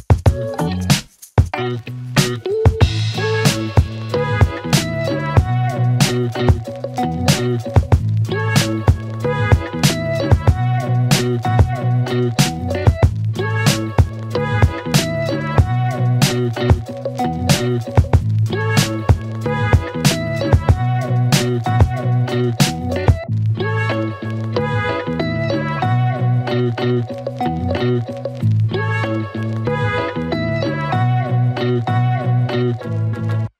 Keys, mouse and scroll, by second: 1.4 click, 3.3 ctrl+d, 4.4 click, 6.9 click, 12.9 click, 16.1-17.6 alt+click, 27.4-28.2 click, 30.2 click, 30.5 right click.